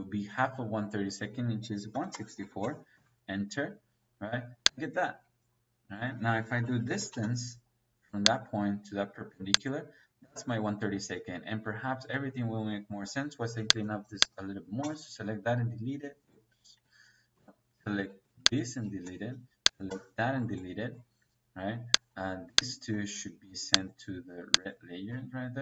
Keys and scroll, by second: 1.8 KP_1, 2.1 KP_Divide, 2.3 KP_6, 2.6 KP_4, 2.8 Return, 5.8 Escape, 6.4-7.0 typing, 10.8 Escape, 12.5 Escape, 14.7 Delete, 17.0 ctrl+z, 18.0 Escape, 18.9 Delete, 19.8 Delete, 25.0 Escape.